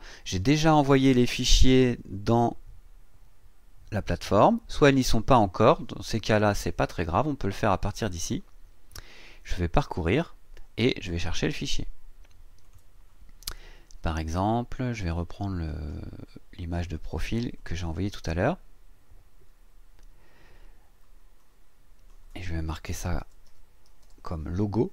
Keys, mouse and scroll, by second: 8.0 click, 12.6 click, 13.9 scroll down 2, 15.1 click, 16.6 click, 17.5 click, 21.4 click, 22.9-24.5 typing.